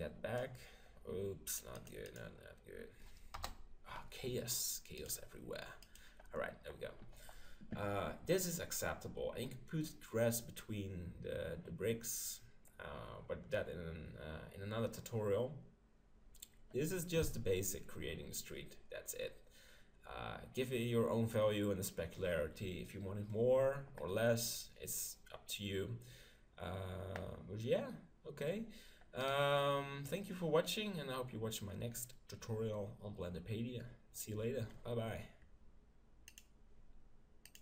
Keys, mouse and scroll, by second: 2.2-3.3 drag, 3.3 KP_0, 5.0-6.6 drag, 29.2-31.1 right drag.